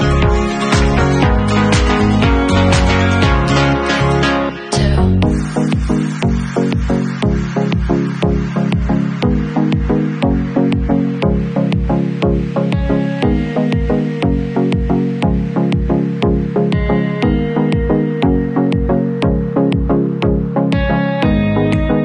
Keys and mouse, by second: 0.8-17.1 drag, 19.8-22.0 drag.